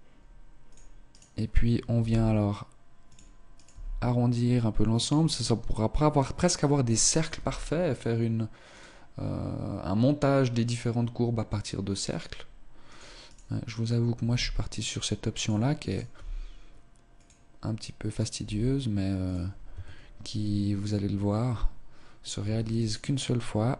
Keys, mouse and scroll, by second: 1.1 right click, 2.0 g, 3.6 right click, 3.7 g, 7.2 right click, 7.4 g, 12.0 right click, 12.9 right click, 13.3 right click, 14.3 g, 14.8 click, 15.9 right click, 16.2 g, 18.2 right click, 18.4 g, 19.7 Tab, 20.8 scroll down 1, 22.4 Tab, 22.8 right click.